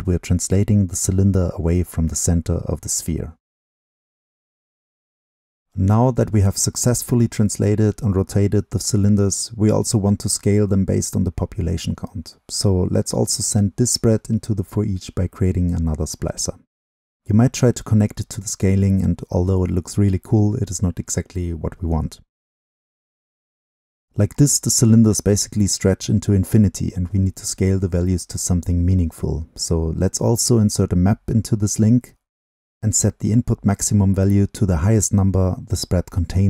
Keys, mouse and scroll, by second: 3.9-5.3 right drag, 5.3-9.9 drag, 19.5-21.2 scroll up 2, 21.2 scroll up 1, 26.0-29.8 drag, 30.0-34.0 drag, 34.8-36.4 drag.